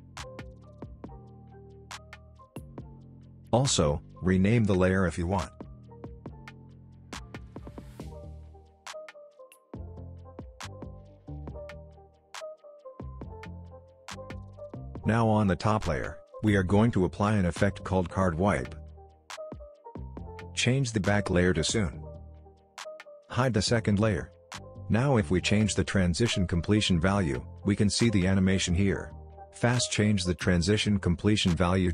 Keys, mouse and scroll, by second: 0.0-0.7 typing, 0.8 Return, 0.9-1.4 click, 1.6 click, 2.2 ctrl+alt+Home, 2.3 click, 3.0 ctrl+alt+Home, 3.1 click, 4.2 right click, 4.6 click, 5.4 shift+s, 6.8-7.9 typing, 8.5 click, 11.0 ctrl+z, 12.0 click, 13.5 ctrl+z, 15.5 click, 18.5 typing, 19.2 click, 23.8-30.9 drag, 25.3-30.5 drag, 31.1 click.